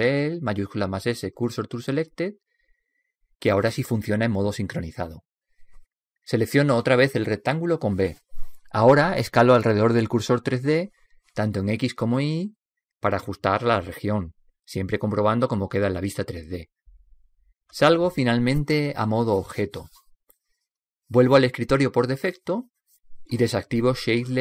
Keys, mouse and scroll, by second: 7.3 b, 9.2 b, 11.5 s, 15.7 s, 22.2 Tab, 23.4-24.4 drag.